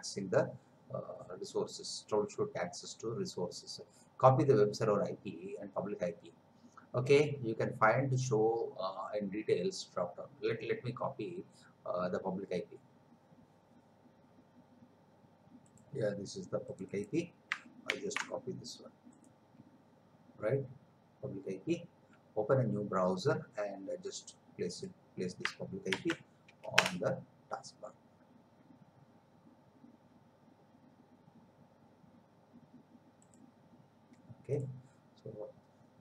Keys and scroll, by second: 17.9 ctrl+c, 25.9 ctrl+v, 26.8 Return.